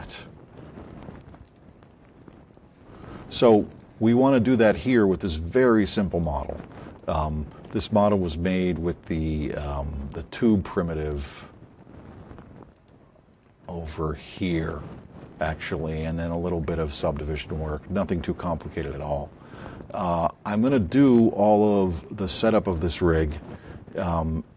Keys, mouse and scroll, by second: 2.2-4.0 drag, 11.2 click, 12.7 click, 13.4 right click.